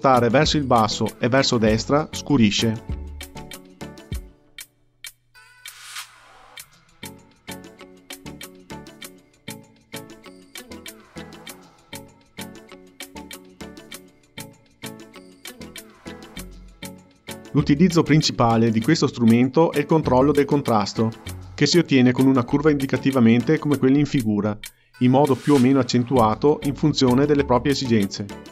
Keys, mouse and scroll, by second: 4.4-12.5 drag, 13.7 click, 17.1-19.6 drag, 20.0-25.1 drag.